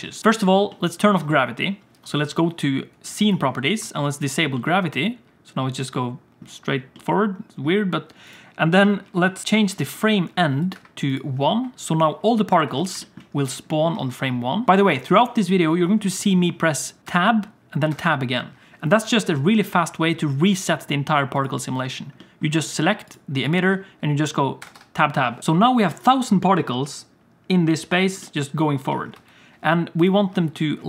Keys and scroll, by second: 3.8 space, 3.9 space, 9.4 space, 12.5 Tab, 12.6 Tab, 13.9 space, 14.7 space, 17.0 Tab, 17.9 Tab, 24.6 Tab, 24.7 Tab, 25.4 space, 26.9 space, 29.1 space, 30.3 space.